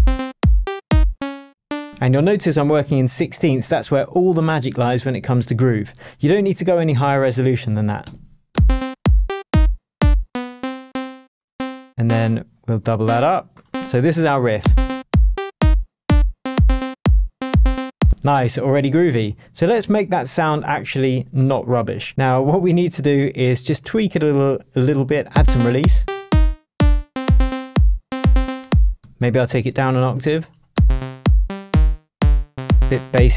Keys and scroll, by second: 1.1 space, 1.6 Up, 1.9 Right, 8.0 space, 8.2 Right, 8.5 space, 10.2 space, 14.6 space, 15.0 shift+Tab, 18.0 space, 20.4 super+l.